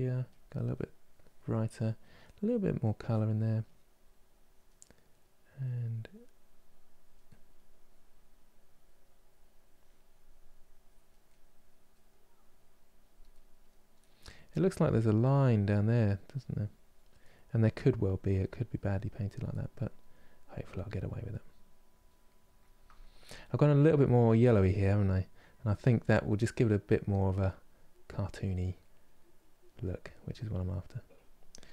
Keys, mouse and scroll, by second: 0.4-1.5 middle drag, 1.5 click, 1.9-3.3 middle drag, 3.3-4.5 drag, 4.5 middle click, 5.3-7.0 drag, 7.0 middle click, 7.4-10.9 drag, 10.9-12.1 middle drag, 12.1 click, 13.0-14.2 middle drag, 14.2-16.9 drag, 16.9 middle click, 17.6-19.2 drag, 19.2 middle click, 19.7-21.9 drag, 21.9-23.7 middle drag, 23.7 click, 24.3 middle click, 24.9 click, 25.7 middle click, 26.5-28.5 drag, 28.5 middle click, 29.0 click, 29.8 middle click, 30.3-31.7 drag.